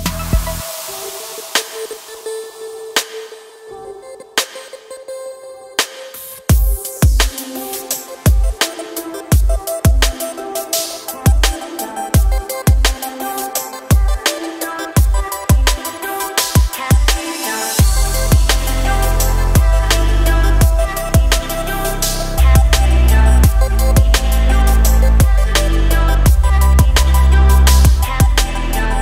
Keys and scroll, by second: 4.4 KP_7.